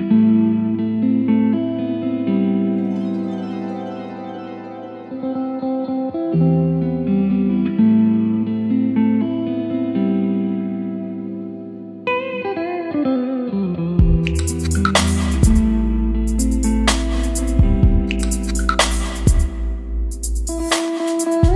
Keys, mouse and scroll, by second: 7.5-9.0 drag, 12.2-21.5 drag, 21.3-21.5 typing.